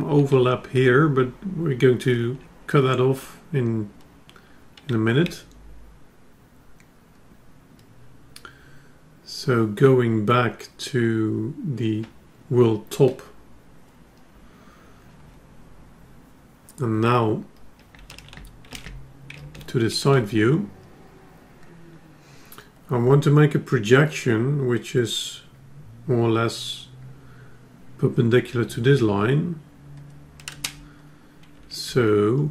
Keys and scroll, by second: 18.4 ctrl+Tab.